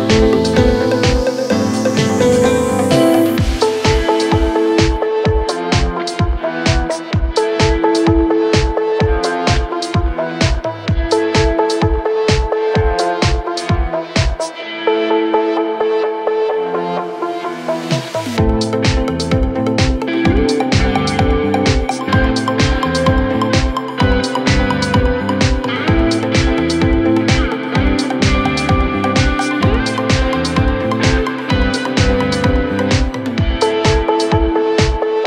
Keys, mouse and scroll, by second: 1.8 scroll down 3, 2.0 middle click, 2.3 space, 2.9 middle click, 3.1 scroll down 2, 3.2-3.9 scroll up 6, 3.9 typing, 4.7 Escape, 5.9 Escape, 6.1 scroll up 13, 7.2-8.0 typing, 8.1-8.7 scroll down 11, 8.7 middle click, 9.0 scroll up 6, 9.8-10.9 typing, 10.7 scroll down 4, 11.9 Delete, 12.3 double click, 12.3 double click, 12.5 scroll down 5, 12.7 middle click, 13.0 space, 13.4 right click, 15.0 scroll up 4, 15.9 Delete, 17.8 scroll down 5, 17.9 scroll up 1, 18.2 typing, 20.0 scroll up 1, 20.3-21.1 typing, 20.7 scroll down 9, 21.7 double click, 22.3 double click, 23.4 Delete, 23.9 Delete, 24.2 scroll up 2, 24.4 typing, 25.4 scroll down 5, 26.3 scroll down 1, 26.4-26.7 scroll up 1, 26.9-28.4 typing, 27.3-27.7 scroll up 13, 28.4-28.8 scroll down 21, 30.1 Delete, 31.3 double click, 31.8 r, 31.9 scroll up 15, 32.6 scroll down 12, 33.4-33.8 scroll up 7, 33.8 scroll down 16, 34.6 double click, 35.0 Delete.